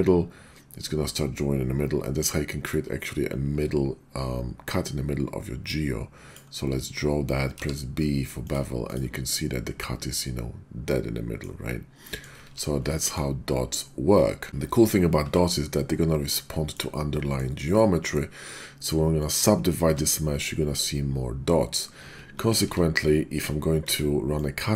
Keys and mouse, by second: 7.5 b, 8.4 click, 8.9 click, 9.3-11.4 middle drag, 11.6 `, 12.0 middle drag, 12.5 ctrl+z, 12.9 click, 12.9 middle click, 12.9 right click, 15.2 Tab, 16.3 middle click, 17.1 middle click, 17.7 click, 19.8 Tab, 22.4 ctrl+z, 22.6 ctrl+z, 23.8 Tab, 24.3-24.7 drag.